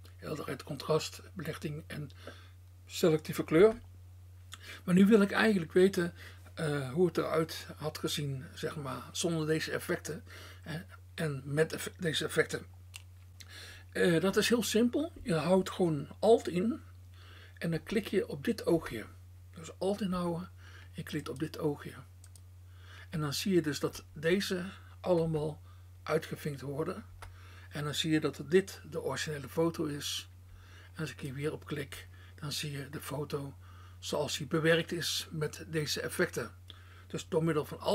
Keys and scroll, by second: 0.0 BackSpace, 3.7 BackSpace, 18.1 BackSpace, 25.2 alt+BackSpace.